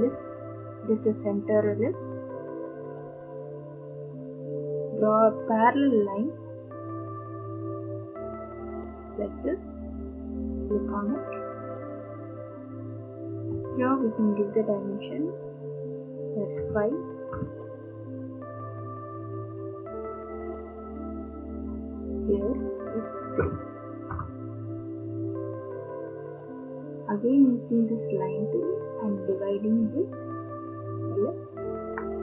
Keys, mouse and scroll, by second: 1.5 click, 3.6 click, 9.9 click, 12.2 click, 13.5 Escape, 15.2 click, 15.4 click, 16.6 5, 17.3 Return, 19.8 middle click, 19.9 scroll up 1, 20.0 middle click, 20.2 middle click, 20.4 scroll down 2, 20.6 middle click, 20.8 middle click, 22.2 scroll down 5, 22.3 click, 22.5 click, 22.5 scroll, 23.4 3, 23.5-24.0 scroll down 5, 24.1 Return, 25.1 scroll down 5, 27.8 click, 29.4 click, 31.3 click.